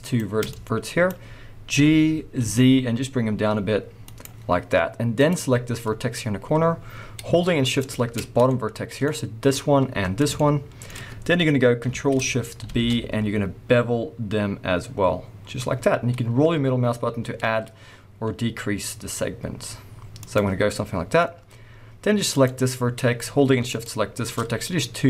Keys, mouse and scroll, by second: 0.0 shift+click, 1.7 g, 4.2 click, 5.1 click, 5.8-6.7 scroll up 1, 6.7-7.3 scroll down 1, 7.7 shift+click, 8.3 scroll down 1, 8.4 middle click, 10.4 shift+middle click, 12.7 ctrl+shift+b, 20.3 click, 20.7 middle click, 22.3 click, 23.7 shift+click.